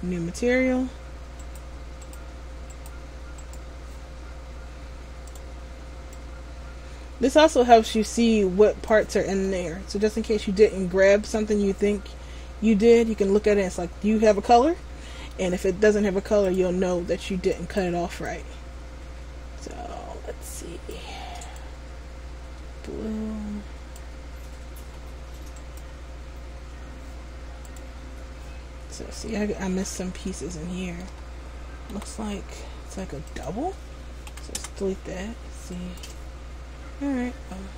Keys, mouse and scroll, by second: 1.5 right click, 2.2 right click, 3.6 right click, 5.4 click, 9.6 middle click, 13.7 middle click, 16.6 click, 25.8 right click, 27.8 click, 29.1 scroll up 1, 30.7 shift+middle click, 30.7 scroll up 1, 32.0 g, 34.4 Delete, 36.0 right click.